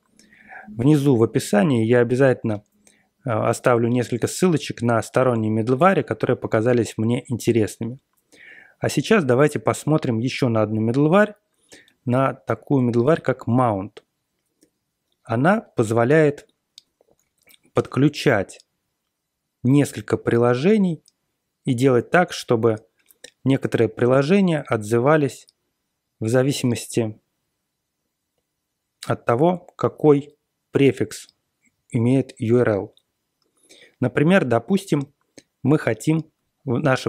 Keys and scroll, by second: 16.7 super+=.